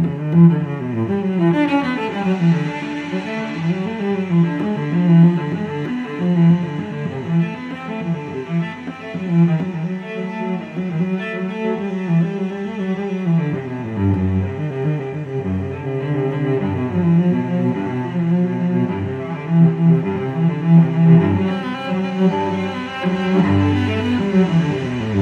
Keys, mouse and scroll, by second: 1.1 click, 3.7 click, 6.5 click, 8.1-9.7 drag, 12.6 click, 15.0 click, 16.7-17.2 scroll down 1, 17.4 scroll up 1, 18.7 click, 20.7 click, 22.2 2, 23.7 click.